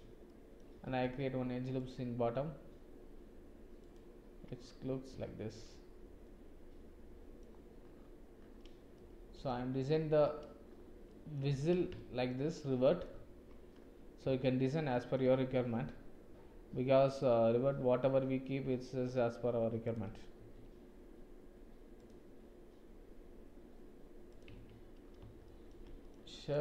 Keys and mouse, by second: 0.2 shift+middle click, 0.9 ctrl+r, 5.2 Tab, 5.6-7.3 drag, 8.9 click, 9.9 shift+click, 11.0 click, 11.4 Tab, 11.9 shift+click, 12.5 click, 14.3 shift+middle click, 14.8 middle click, 15.4 ctrl+r, 20.3 ctrl+r, 24.5 Tab, 25.4 shift+click, 25.6 shift+middle click, 26.0 middle click, 26.4 click.